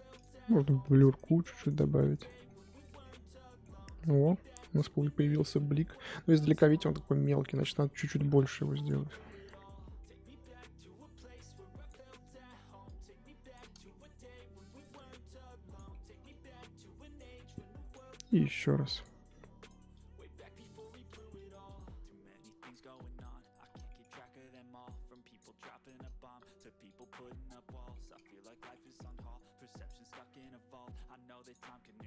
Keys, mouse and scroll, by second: 2.4-2.8 scroll down 8, 2.8 middle click, 3.1-4.6 scroll up 4, 3.5 middle click, 4.6-5.3 scroll up 2, 5.3-5.7 scroll down 1, 5.7 middle click, 5.9-6.4 scroll up 5, 6.4-7.4 scroll down 7, 7.4 middle click, 7.5-8.8 scroll up 10, 8.8 click, 9.8-10.8 middle drag, 10.8-11.5 scroll down 1, 11.5-13.8 drag, 13.8 shift+middle click, 14.6-15.8 drag, 15.8 scroll down 1, 15.9 shift+middle click, 16.5-19.2 drag, 19.2 f, 19.9-23.8 drag, 23.8 shift+middle click, 24.5-27.1 drag, 27.1-27.7 scroll down 10, 27.7 middle click, 28.2-29.3 scroll up 8, 28.7 middle click, 29.3-32.0 drag.